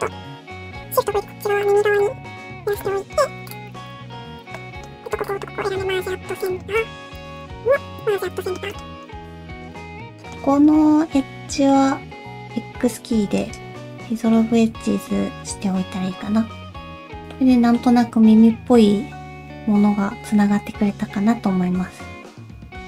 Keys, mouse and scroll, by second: 1.1 shift+v, 1.9 click, 2.4 shift+v, 2.8 middle click, 3.3 alt+z, 3.5 click, 3.7 shift+click, 3.9 shift+click, 4.1 ctrl+z, 4.4 click, 4.6 middle click, 5.0 shift+click, 5.2 shift+click, 5.8 m, 6.6 middle click, 7.1 click, 7.4 shift+click, 7.6 alt+z, 8.1 shift+r, 8.4 scroll down 2, 8.5 middle click, 8.8 middle click, 9.1 shift+middle click, 9.4 2, 9.7 alt+click, 9.9 middle click, 10.6-11.1 scroll down 2, 11.2 middle click, 12.1 x, 13.9 scroll down 3, 14.3 middle click, 17.3 scroll down 2, 17.3-17.7 scroll up 2, 17.7 middle click.